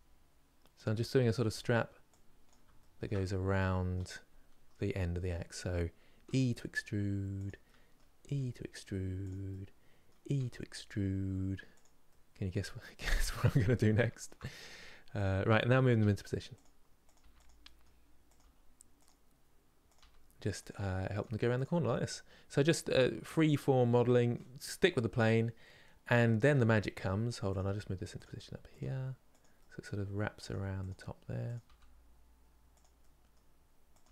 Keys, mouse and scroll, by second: 0.7-2.2 middle drag, 2.2 click, 2.6-6.0 shift+middle drag, 6.0 e, 7.3 middle click, 7.9 e, 9.2 middle click, 10.1 e, 11.8-13.2 middle drag, 13.2 scroll up 3, 13.6-14.9 shift+middle drag, 14.9 click, 15.7 g, 16.8 click, 16.9 g, 17.4 middle click, 18.0 click, 18.1 g, 19.6 click, 20.9 g, 21.5-24.5 middle drag, 24.5-24.9 scroll down 1, 24.9-27.2 middle drag, 27.2 click, 27.3 g, 28.5 click, 29.3 middle click, 30.2 g, 31.2 click, 31.3 g, 32.7 middle click, 33.7 click.